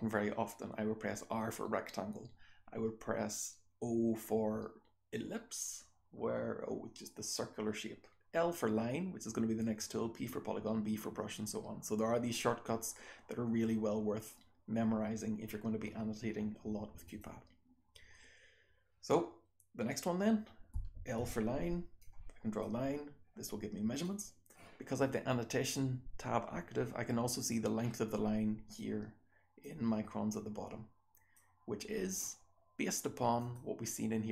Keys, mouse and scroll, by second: 17.0 click, 20.7 l, 22.0-22.5 drag, 24.0-24.4 drag, 28.7-29.5 drag, 30.2-31.3 drag, 33.4 click.